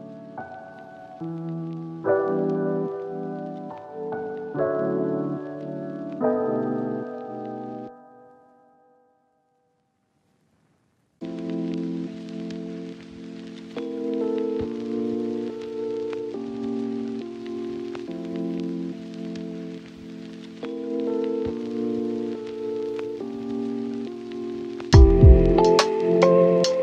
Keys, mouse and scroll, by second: 1.0 scroll down 1, 1.1 scroll up 1, 2.3 click, 4.6 typing, 5.4 Return, 6.4 click, 6.7 right click, 7.0 click, 7.2 right click, 7.8 click, 10.3 Delete, 10.8 right click, 11.4 Tab, 12.4 ctrl+shift+click, 13.5 Return, 14.0 click, 14.1 Tab, 14.5 scroll up 1, 14.7 Tab, 15.0 ctrl+shift+click, 15.5 typing, 15.8 Return, 16.1 Tab, 16.6 click, 16.7 scroll down 1, 16.8 scroll up 1, 16.9 Tab, 17.3 right click, 18.8 Tab, 19.0 scroll up 1, 19.2 ctrl+shift+click, 20.7 scroll up 1, 20.9 click, 21.2 ctrl+shift+click, 22.0 Return, 22.7 click, 23.0 Tab, 23.2 right click, 23.3 ctrl+shift+click, 24.0 ctrl+shift+click, 25.5 Tab, 26.1 ctrl+shift+click.